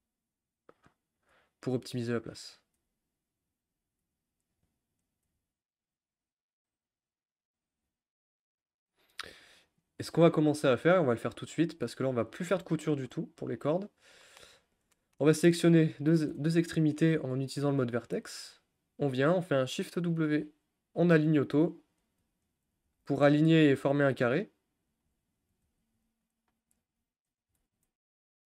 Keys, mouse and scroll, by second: 1.2 click, 1.3 g, 2.6 click, 2.7 g, 3.7 click, 4.0 g, 5.0 click, 5.2 g, 7.5 click, 7.7 g, 15.7 click, 17.3-18.3 drag, 18.9 shift+click, 21.3 shift+w, 22.0 click, 24.2 shift+w, 24.9 click, 26.3 shift+w, 26.8 click.